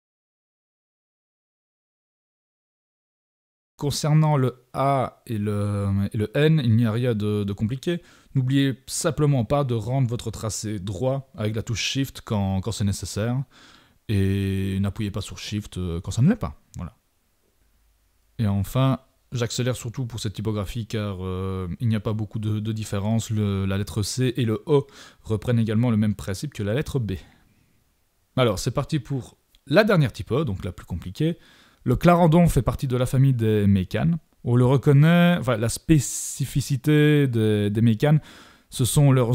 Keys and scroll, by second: 1.6 super+=, 12.5 super+z, 20.0 super+=, 22.2 super+z, 27.4 super+=, 27.5 super+y, 28.0 super+y, 28.1 super+y.